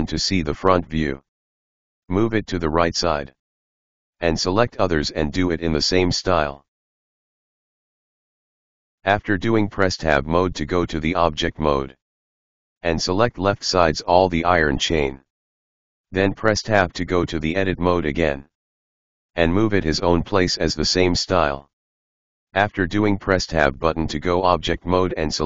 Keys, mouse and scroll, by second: 0.2 scroll down 2, 0.5-0.9 scroll up 1, 0.9 KP_1, 1.5 g, 3.4 g, 4.3 middle click, 4.6 right click, 4.8-8.1 typing, 5.5 right click, 6.4 right click, 6.9 right click, 7.6 right click, 8.9 right click, 9.2 g, 11.3 Tab, 13.6 drag, 14.7-15.1 drag, 15.1 Tab, 15.2 middle click, 15.8 right click, 16.1 KP_1, 16.4 g, 17.4 right click, 17.5 g, 18.2 right click, 18.3 g, 19.1 right click, 19.2 g, 20.2 right click, 20.5 g, 21.5 ctrl+z, 21.6 ctrl+z, 22.0 right click, 22.2 g, 22.8 right click, 22.9 g, 23.7 right click, 23.9 g, 25.3 Tab.